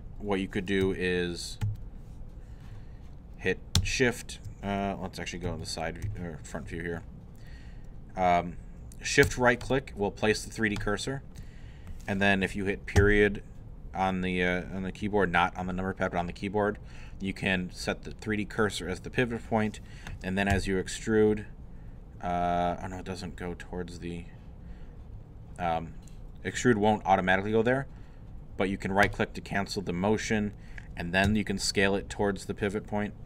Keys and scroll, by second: 0.8 |, 1.6 3, 5.5 3, 6.0 i, 13.0 •, 20.5 e, 31.3 s.